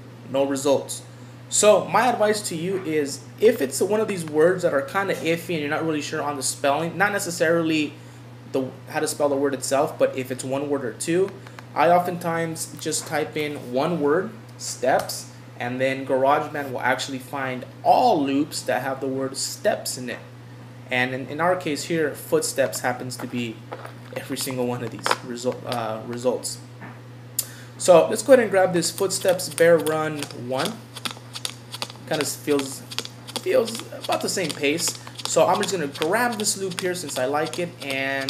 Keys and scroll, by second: 15.0 Return.